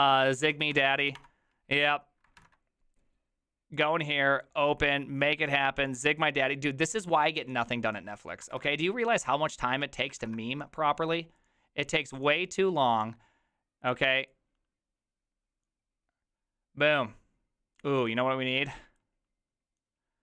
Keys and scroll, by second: 0.0-1.6 typing, 2.4 alt+=, 8.6 ctrl+c, 10.2 ctrl+v.